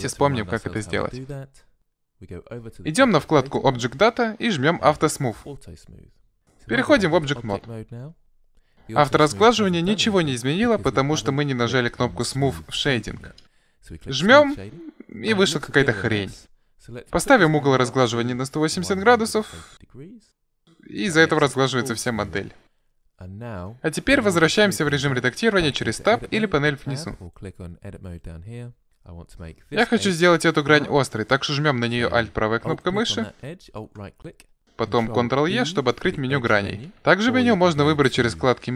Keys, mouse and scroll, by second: 4.0 click, 5.5 click, 7.0 Tab, 8.0 middle click, 14.5 click, 15.1-16.8 middle drag, 18.3-20.0 drag, 20.3-22.0 middle drag, 27.2-28.8 drag, 29.0 middle click, 32.8-35.7 right drag, 35.7 ctrl+e.